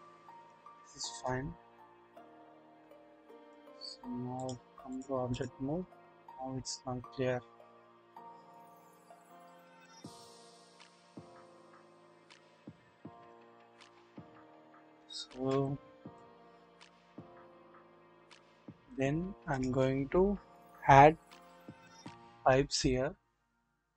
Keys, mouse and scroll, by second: 1.3-3.5 drag, 4.4-5.0 drag, 5.2 click, 6.3-8.7 drag, 9.2-9.9 scroll down 1, 9.9-11.8 drag, 12.3 shift+middle click, 12.3-13.2 shift+drag, 13.8 drag, 13.8-14.1 scroll down 2, 14.4-14.8 shift+middle drag, 15.5-16.2 scroll up 1, 16.2-19.0 middle drag, 16.2-16.8 scroll up 1, 16.8-19.0 scroll up 1, 19.1-19.9 scroll down 1.